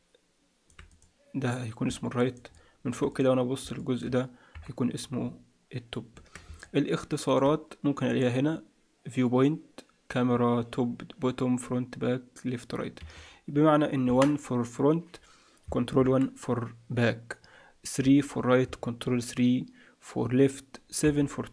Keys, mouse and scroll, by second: 0.9 click, 1.9 middle click, 2.5 middle click, 3.1 click, 3.7 middle click, 4.5 KP_7, 5.0-5.5 scroll up 2, 5.5-6.1 scroll up 1, 6.1 Tab, 6.6 middle click, 8.1 click, 13.5-14.0 scroll down 2, 14.0 KP_1, 15.9 ctrl+KP_1, 18.0 KP_3, 19.0 ctrl+KP_3, 21.0 KP_7.